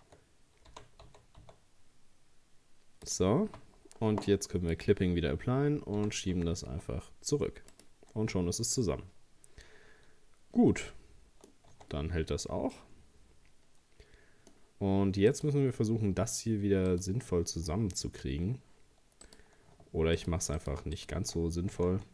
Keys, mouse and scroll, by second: 0.7 g, 4.7-6.0 drag, 6.0 g, 8.2 Tab, 8.6-11.6 middle drag, 11.7 Tab, 12.1-12.4 scroll up 2, 12.7 scroll up 1, 12.8-15.3 middle drag, 15.3 right click, 16.9 right click, 19.3 right click, 20.2 right click.